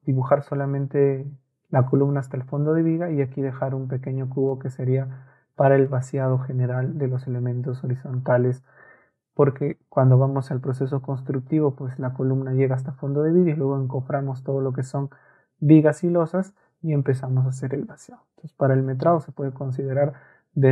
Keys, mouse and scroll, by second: 20.2 Escape.